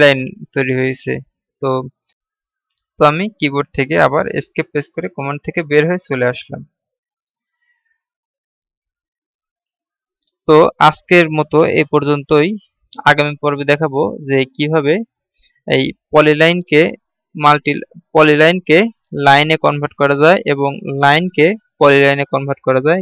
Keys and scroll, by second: 5.0 Escape.